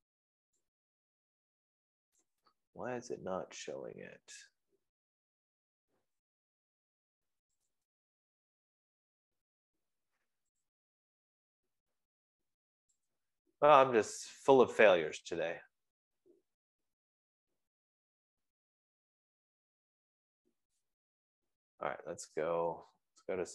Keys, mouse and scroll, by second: 0.0-0.4 scroll, 0.7-1.3 scroll, 2.8 right click, 3.5 scroll, 4.3 middle click, 8.2 click, 9.3 click, 11.1 click, 12.4-13.0 scroll, 13.0 click, 13.5-14.3 scroll, 16.0 click, 21.3 Escape, 21.5-22.3 scroll.